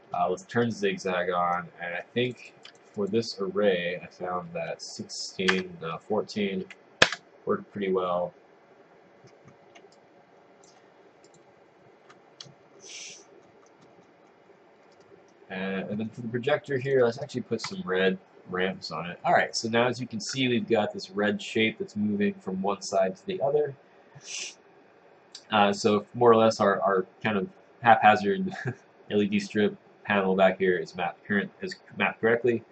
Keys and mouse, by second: 10.1 click, 11.5 click.